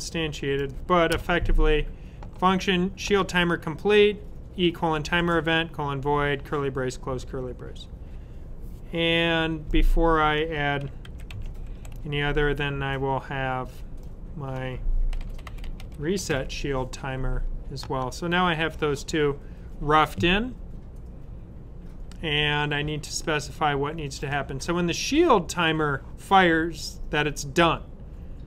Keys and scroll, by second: 11.0 super+c, 15.1 typing, 19.1 typing.